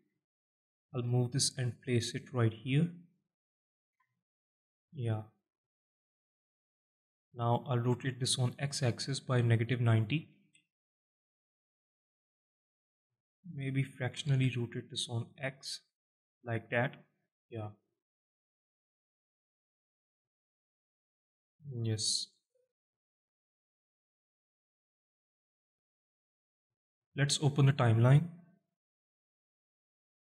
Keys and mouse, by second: 0.0 alt+shift+middle drag, 0.8 g, 3.3 click, 3.6 z, 3.9-4.3 alt+middle drag, 4.7 alt+shift+middle drag, 5.4 KP_Decimal, 6.1 alt+middle drag, 7.0 alt+middle drag, 7.5 alt+shift+middle drag, 8.2 alt+shift+middle drag, 8.9 r, 9.3 x, 10.1 KP_Subtract, 10.4 KP_9, 10.5 KP_0, 11.0 KP_Enter, 12.4-12.7 alt+middle drag, 12.9 alt+shift+middle drag, 13.4 alt+middle click, 13.9 r, 14.3 x, 16.7 click, 17.1 alt+shift+middle drag, 17.7-18.3 alt+middle drag, 19.1 click, 20.0-22.0 alt+middle drag, 22.6 r, 23.0 x, 23.9 drag, 24.1-25.1 alt+middle drag, 25.6 alt+shift+middle drag, 26.0 alt+middle drag, 26.5 alt+shift+middle drag, 27.7 click, 28.9-29.9 drag.